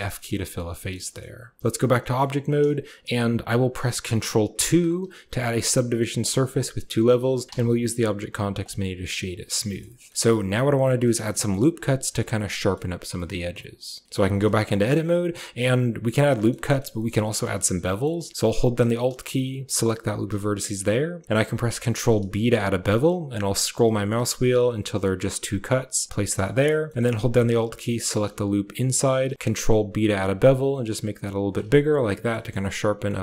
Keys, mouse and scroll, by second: 0.0 click, 0.4 click, 0.7 shift+click, 0.9 click, 1.6 Tab, 1.9 shift+click, 4.6 ctrl+2, 5.5-5.9 drag, 6.2 shift+drag, 6.5 drag, 7.5 w, 9.3 drag, 9.6 shift+click, 9.8 click, 10.1-10.4 drag, 10.9 shift+middle click, 11.1 middle click, 12.2 click, 14.1 Tab, 14.4 shift+click, 16.2 click, 16.5 shift+click, 16.8 click, 17.3 click, 17.7 click, 19.6 alt+click, 21.4 ctrl+b, 26.3 click, 26.6 shift+middle click, 26.9 middle click, 27.8 alt+click, 28.9 ctrl+b, 32.0 middle click, 32.3 shift+middle click, 32.5 middle click, 33.1 shift+middle click.